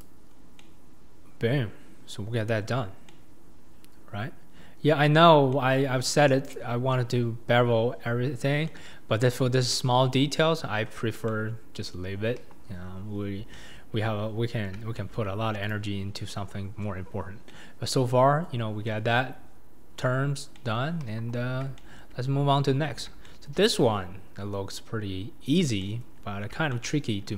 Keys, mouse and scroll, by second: 0.0 click, 0.3 scroll down 2, 0.6-2.8 middle drag, 2.8 scroll up 4, 3.1-6.5 middle drag, 6.5 click, 6.9-11.1 middle drag, 11.1 scroll up 1, 11.2-12.0 middle drag, 12.0-12.4 scroll down 2, 12.4 KP_1, 12.6-13.5 scroll down 8, 13.5-14.1 shift+middle drag, 14.1-14.5 scroll up 1, 14.5-14.9 scroll down 2, 14.9-15.7 shift+middle drag, 15.7 click, 16.4-17.2 scroll up 2, 17.2 scroll down 1, 17.5-20.2 middle drag, 20.2-20.5 scroll down 2, 20.5-21.0 middle drag, 21.0 KP_1, 21.8-26.2 shift+middle drag, 26.2-26.7 scroll down 3, 26.7-27.3 shift+middle drag.